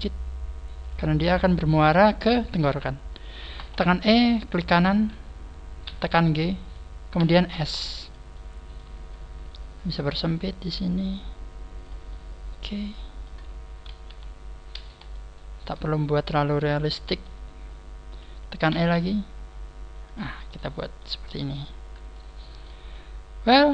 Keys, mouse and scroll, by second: 1.4 click, 3.7 e, 5.5 right click, 5.8 g, 7.1 s, 8.0 click, 8.3 middle click, 8.9 scroll up 2, 9.7 click, 9.7 middle click, 9.7 scroll up 1, 12.0 middle click, 13.5 scroll down 2, 14.0 KP_3, 15.1 shift+middle click, 16.0 scroll up 3, 17.0 r, 18.1 click, 18.7 e, 20.1 click, 20.4 middle click, 21.3-22.1 scroll down 6, 22.0 middle click, 23.5 middle click.